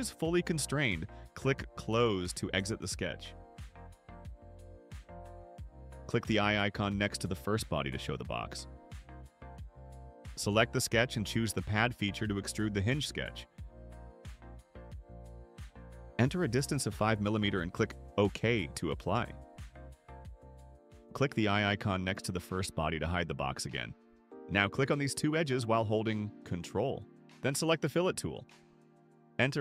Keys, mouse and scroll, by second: 3.5 click, 7.8 click, 10.4 click, 12.5 click, 16.2 5, 17.0 click, 20.0 click, 21.2 middle click, 21.2 scroll up 2, 23.1 click, 24.2 click, 24.7 click, 25.6 ctrl+click, 28.0 click, 28.3-29.6 typing.